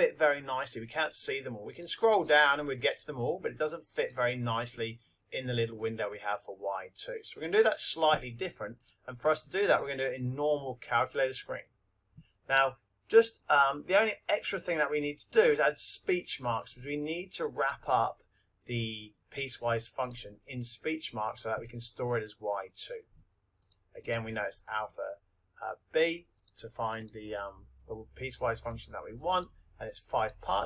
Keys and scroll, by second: 1.7 Down, 3.9 Up, 26.3 Right, 29.3 Down, 30.1 Return.